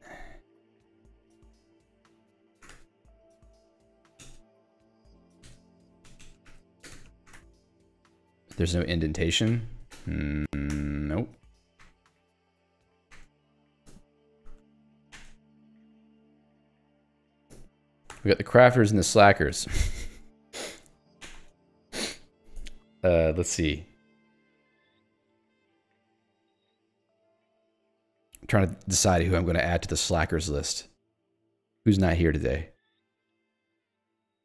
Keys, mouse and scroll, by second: 2.2-5.5 typing, 6.5 ctrl+g, 7.0-8.6 typing, 9.0 Escape, 9.6 alt+l, 10.0 alt+h, 10.5 Escape, 10.8-18.2 typing, 13.7 ctrl+s, 13.9 Escape, 17.3 ctrl+s, 17.6 Escape, 19.0 Escape, 19.3 ctrl+s, 19.6 Escape, 20.1 i, 21.3 *, 21.6 space, 21.9 Escape, 22.2 a, 22.6 Escape, 24.2 Escape, 25.0 a, 25.7 Escape, 26.0 ctrl+s, 34.0-34.4 typing.